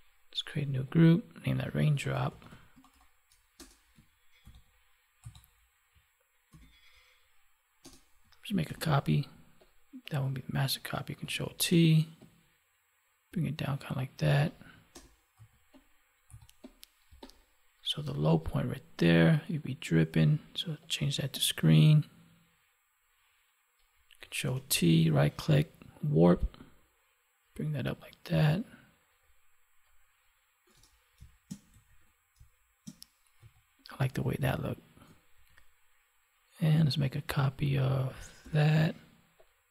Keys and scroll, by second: 4.4 ctrl+v, 6.5 ctrl+t, 8.6 ctrl+j, 11.2 ctrl+t, 17.0 space, 24.4 ctrl+t, 31.2 space, 35.3 ctrl+1, 38.4 ctrl+j.